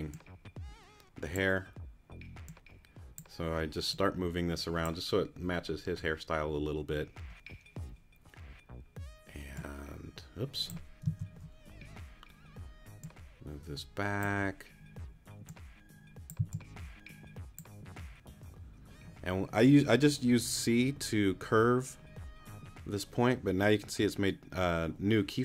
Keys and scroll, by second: 12.1 super+z, 16.4 c.